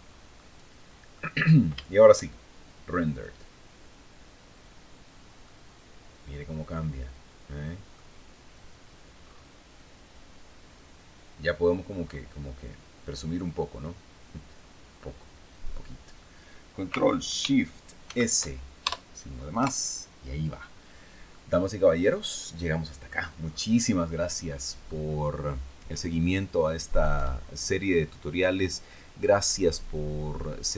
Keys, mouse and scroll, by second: 0.9 scroll down 1, 1.3 shift+click, 2.6 click, 4.0 click, 4.9-7.6 drag, 8.7-9.0 scroll up 2, 11.0-11.7 scroll down 4, 13.2 click, 15.0 click, 17.5 ctrl+shift+s, 18.3 ctrl+shift+KP_Add, 19.1 KP_Enter, 20.4 scroll down 2, 20.8-22.7 drag, 22.9 scroll up 2.